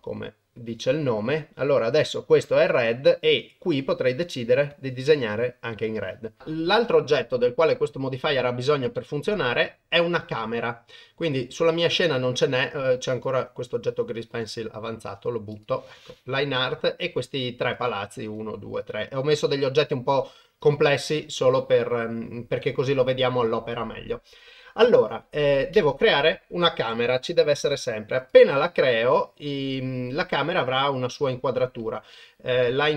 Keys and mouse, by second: 3.9 click, 5.4 click, 7.6-8.4 middle drag, 9.0 middle click, 13.2 click, 14.3 Delete, 17.0 middle click, 18.8 click, 20.7 click, 21.2 shift+middle drag, 21.6-22.3 middle drag, 22.7-23.1 middle drag, 25.7 shift+a, 29.5-30.9 middle drag, 31.3-31.9 middle drag, 32.1 middle drag, 32.7 shift+middle drag.